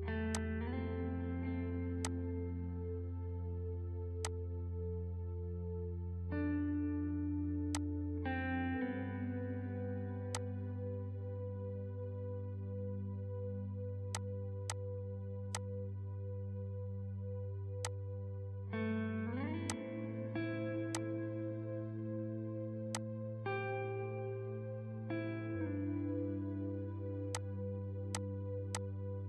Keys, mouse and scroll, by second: 0.3-2.0 drag, 4.2-6.8 drag, 6.8 scroll up 1, 7.7-9.5 drag, 9.5 scroll down 1, 10.4-11.8 drag, 11.8 shift+F2, 13.0 click, 17.8 click, 18.6-19.0 scroll up 1, 19.7 click, 19.9-20.2 scroll up 1, 21.0-22.3 drag, 22.3 scroll down 1, 22.9 click, 23.2-24.0 scroll down 1, 26.6-27.4 scroll up 1, 27.4 click.